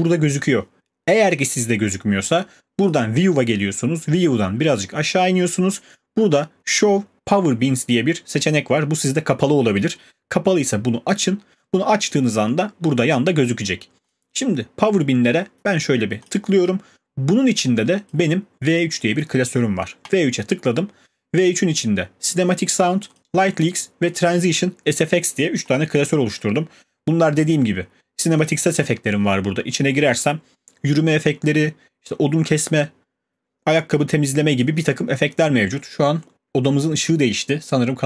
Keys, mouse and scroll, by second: 14.1 click, 18.1 click, 20.1 click, 24.1 click, 25.7 click, 28.4 click, 28.8 click.